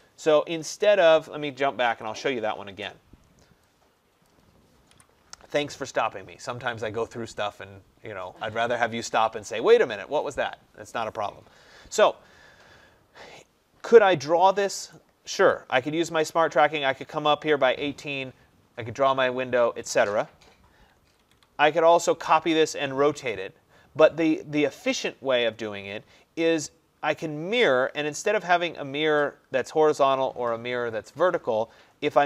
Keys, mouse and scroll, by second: 0.8 click, 1.8 Escape, 1.9 Escape, 2.1 Escape, 4.3 click, 5.0 Delete, 6.1 middle click, 15.0 click, 21.1 Escape, 21.3 Escape, 21.4 Escape.